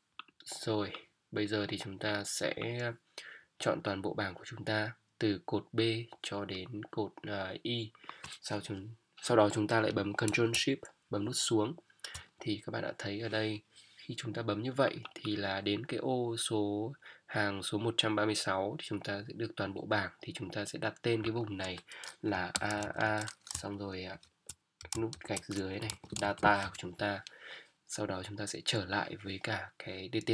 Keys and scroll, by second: 10.3 Up, 11.0 ctrl+shift+Down, 22.5 shift+a, 24.1-26.2 typing, 26.6 Return.